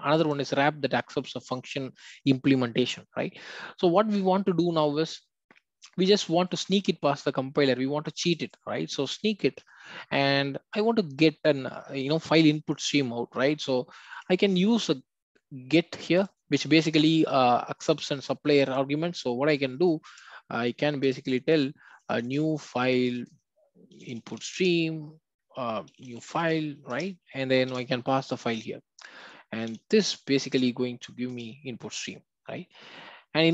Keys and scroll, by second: 24.6 Return, 26.9 Return, 30.0 alt+Return.